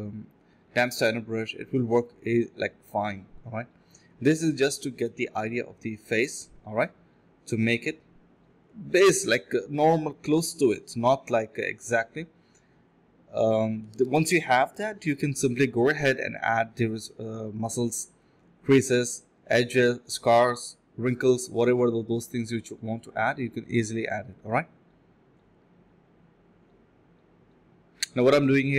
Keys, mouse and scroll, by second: 0.7 alt+click, 1.0 alt+click, 1.5 1, 4.1 2, 6.5 alt+click, 6.8 alt+click, 7.1 alt+click, 7.9 ctrl+b, 8.3-8.8 typing, 8.9 alt+click, 9.0 alt+double click, 9.1 alt+click, 9.6 alt+click, 9.6 alt+click, 9.9 alt+click, 10.1 typing, 11.0 alt+click, 12.0 alt+click, 12.9 typing, 13.9 double click, 15.2 alt+click, 15.4 alt+click, 15.6 alt+click, 18.5 alt+click, 18.8 alt+click, 19.0 alt+click, 19.9 typing, 22.0 typing, 22.0 alt+click, 22.3 alt+click, 22.7 alt+click, 23.6 alt+click, 24.1 scroll down 1, 24.2 scroll up 1, 24.4 middle click, 25.0 alt+click, 25.4 alt+click, 26.5 alt+click, 27.3 alt+click.